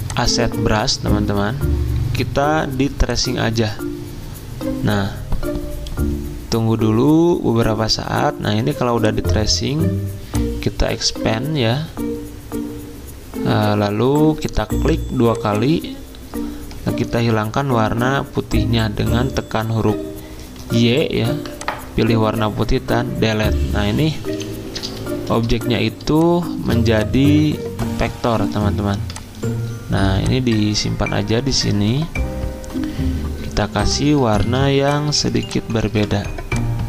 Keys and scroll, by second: 17.5 y, 20.7 y, 22.7 Delete, 24.3 Escape, 25.1 z, 26.6 v, 33.6 i, 34.4 z, 35.9 typing.